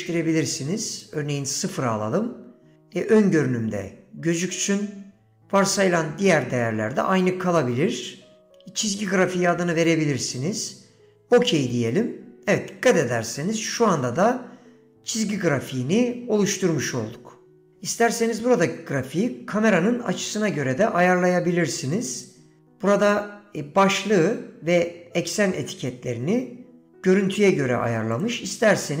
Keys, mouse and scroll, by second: 22.4-29.0 drag.